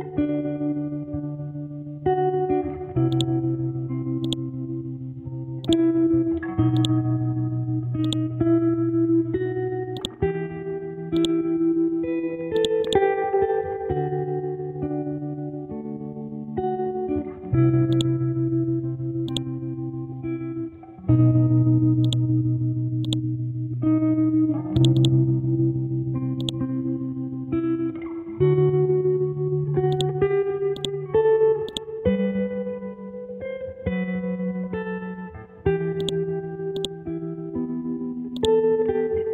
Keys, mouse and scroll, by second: 0.1 Tab, 3.1-12.6 drag, 16.1-17.9 scroll up 1, 17.9-22.0 drag, 23.0 right click, 24.8 click, 28.2 shift+Tab, 29.9 click, 32.0-33.0 scroll down 1, 33.0-34.7 scroll up 1, 36.0 click, 37.2-38.4 scroll down 1, 38.4 click.